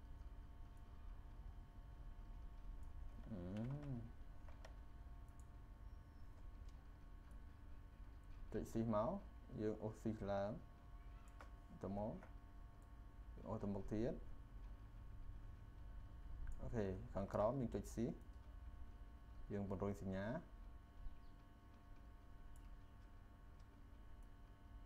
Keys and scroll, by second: 3.6 ctrl+z.